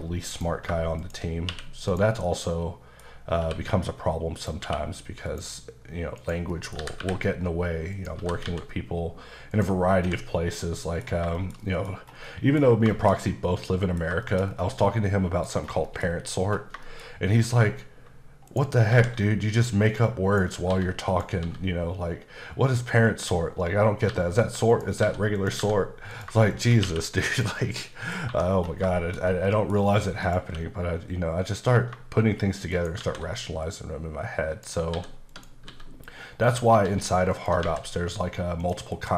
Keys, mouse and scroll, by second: 0.3 click, 1.0 shift+click, 1.5 q, 1.9 click, 2.2 middle click, 3.4 q, 4.5 click, 4.6 q, 5.2 click, 5.8 scroll down 1, 6.2 click, 6.5 middle click, 6.8 typing, 7.9 click, 8.2 typing, 9.5 click, 9.9-10.6 scroll down 3, 10.0 h, 10.6 middle click, 11.0 scroll down 2, 11.4 middle click, 12.2 middle click, 12.9 middle click, 14.2 middle click, 14.5 scroll down 3, 14.7 middle click, 15.5 scroll up 1, 15.8 shift+middle click, 16.1-16.7 scroll up 4, 16.8 shift+middle click, 18.5 shift+right click, 18.9 shift+a, 19.6 click, 20.7 s, 21.1 click, 21.4 s, 23.0 click, 24.1 g, 24.7 click, 25.0 s, 25.3 click, 25.6 g, 26.1 click, 26.5 shift+click, 26.8 q, 27.3 click, 27.8 middle click, 28.2 1, 28.5-28.8 scroll down 2, 28.9 shift+middle click, 29.2 scroll down 1, 29.5 middle click, 30.2 click, 30.4 q, 32.7 shift+right click, 33.0 shift+a, 33.6 click, 34.9 s, 35.3 click, 35.7 s, 36.4 click, 36.8-37.6 typing, 37.3 click, 38.6 click, 38.9 KP_Decimal.